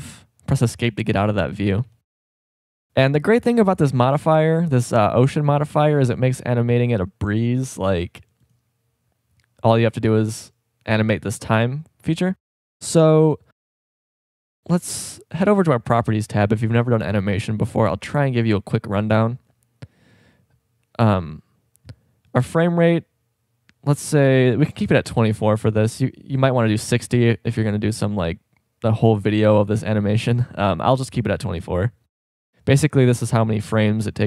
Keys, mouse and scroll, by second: 0.0 Escape, 1.6 Escape, 1.6 z, 1.8 z, 5.1-5.5 shift+scroll up 2, 6.1-12.3 drag, 14.3 click, 22.3-29.5 drag, 32.2-34.2 drag.